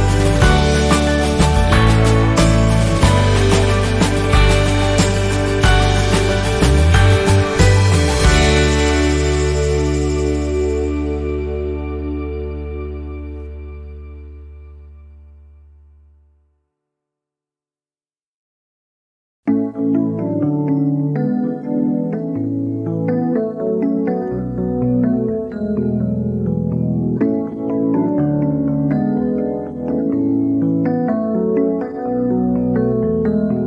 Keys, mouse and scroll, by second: 0.5 z, 2.0 F10, 2.9-6.1 drag, 6.1 Delete, 7.8 z, 8.0 click, 10.9 F10, 11.7 ctrl+a, 12.4 click, 13.7 F10, 14.6-19.6 drag, 19.6 shift+scroll down 1, 21.3 z, 22.0 click, 23.2 F10, 24.0-27.7 drag, 29.9 shift+scroll down 1, 30.9 click.